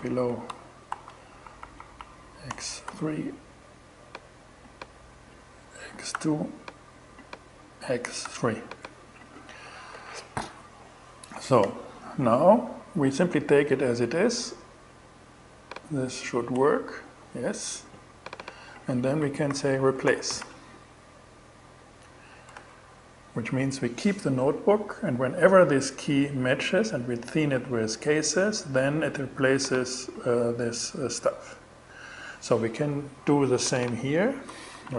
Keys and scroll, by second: 0.3 shift+-, 0.9 shift+Right, 1.9 BackSpace, 2.3 3, 5.2 x, 5.6 2, 7.7 3, 16.0 shift+Return, 18.7-20.2 typing, 22.0 shift+Return, 34.1-34.9 typing.